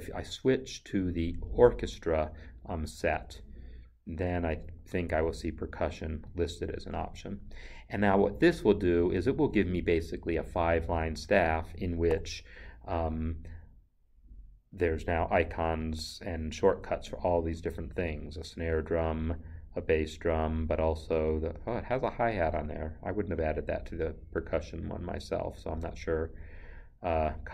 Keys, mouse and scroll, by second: 0.2 click, 6.3 click, 6.4 double click, 11.5 click, 12.1 n.